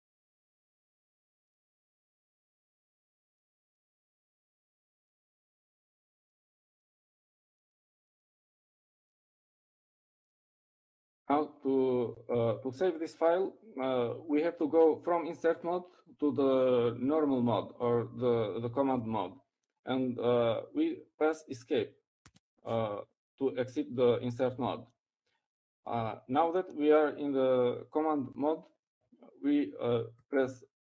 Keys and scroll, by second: 0.3 typing, 1.5-2.5 typing, 5.8 typing, 26.3 Escape.